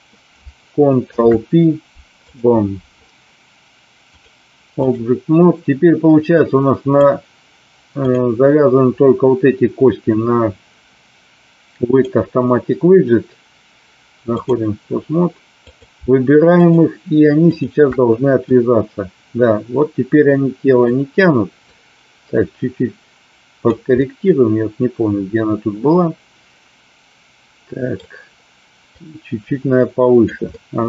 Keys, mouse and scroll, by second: 1.0 ctrl+p, 4.2 click, 6.4 click, 7.9 click, 11.9-14.6 drag, 15.7 click, 18.4-20.9 drag, 21.8-23.7 drag, 24.0-27.9 middle drag, 29.0-30.3 drag, 30.4-30.8 middle drag.